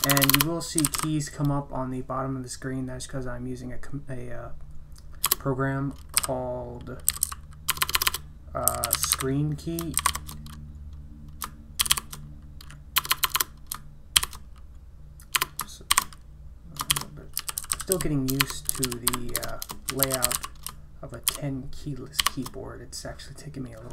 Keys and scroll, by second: 0.0-1.4 typing, 5.2 Return, 6.2-10.1 typing, 11.8 typing, 13.0-22.7 typing.